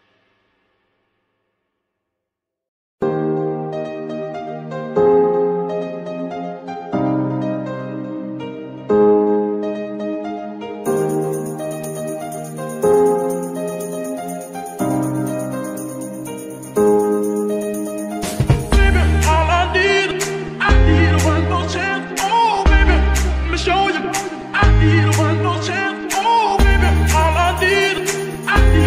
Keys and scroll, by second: 0.5 g, 0.9 Escape, 3.4 g, 3.4 z, 7.4 ctrl+z, 9.9 g, 10.1 z, 10.9 z, 14.8 g, 15.0 z, 15.2 z, 17.2 g, 17.4 z, 17.5 z, 23.8 space, 25.6 shift+n.